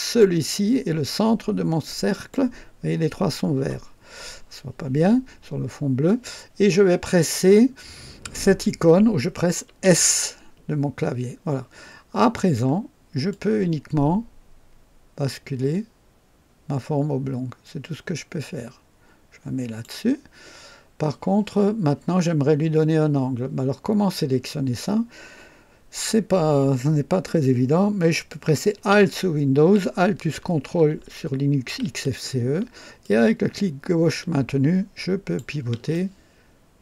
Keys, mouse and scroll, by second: 2.1 click, 3.9 scroll up 2, 5.4 scroll down 2, 9.8 s, 12.4 scroll down 2, 13.3-20.0 drag, 33.0-35.5 ctrl+alt+drag, 35.9 ctrl+alt+right click.